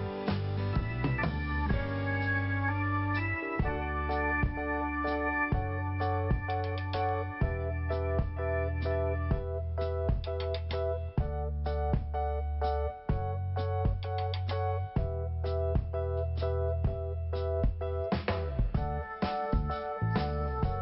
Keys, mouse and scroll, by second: 1.8 scroll down 1, 3.1 click, 3.2 click, 3.7 click, 3.8 click, 4.2-4.6 scroll down 1, 5.0 5, 8.4 click, 8.4 click, 9.2 click, 10.2 scroll up 1, 12.8 click, 12.9 click, 14.0 click, 14.6 Delete, 16.0 click, 19.3 click, 19.4 click, 20.3 click.